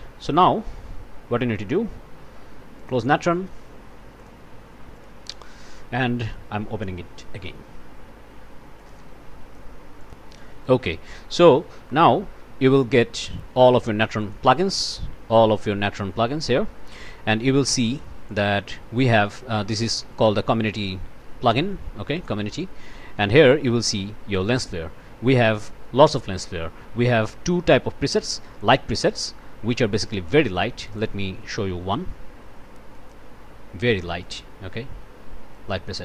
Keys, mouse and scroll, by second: 0.4 click, 4.2 click, 4.9 click, 8.8 click, 10.0 click, 10.8 click, 11.9 click, 14.2 click, 17.9 click, 18.3 click, 19.7 click, 22.2 click, 30.9 click, 32.9 click, 34.2-36.0 drag.